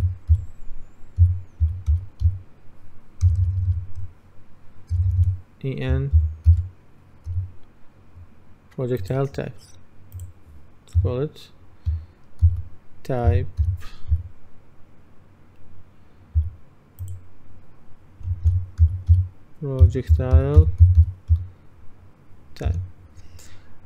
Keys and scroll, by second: 0.0-3.3 typing, 5.0 BackSpace, 6.2 shift+e, 6.6 shift+n, 7.4 p, 11.0 F2, 12.5-14.7 typing, 16.4 s, 20.6-21.4 typing, 22.7 Return.